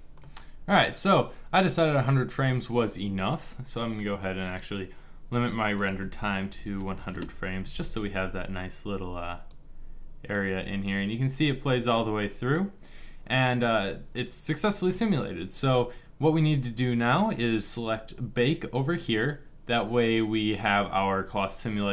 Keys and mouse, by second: 6.6 KP_0, 16.1-21.9 middle drag.